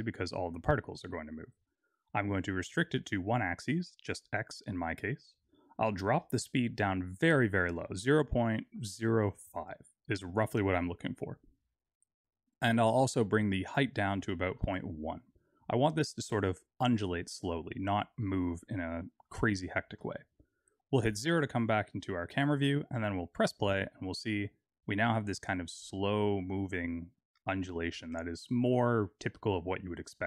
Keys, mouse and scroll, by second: 1.4 click, 3.8 click, 6.2 click, 10.9 scroll up 4, 13.8 click, 17.5 click, 20.2 KP_0, 21.6 KP_0, 23.6 click.